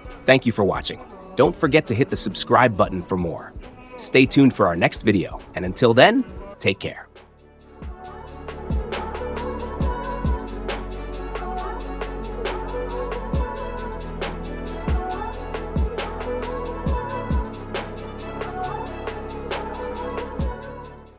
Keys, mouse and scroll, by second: 8.3 Escape.